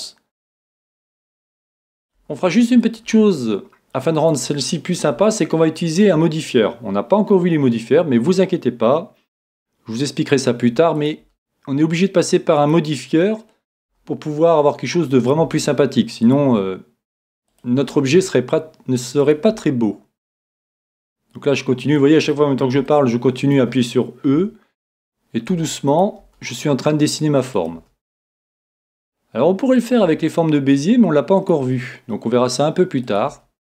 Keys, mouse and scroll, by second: 1.1 e, 5.2-7.1 middle drag, 9.4 e, 11.0-14.5 drag, 11.2 e, 13.9 e, 15.4-23.7 drag, 15.4 e, 17.4 e, 18.1 e, 22.9-24.6 middle drag, 24.3 e, 26.0-29.4 drag, 26.2 e, 27.7 e, 30.0 e, 31.6 e.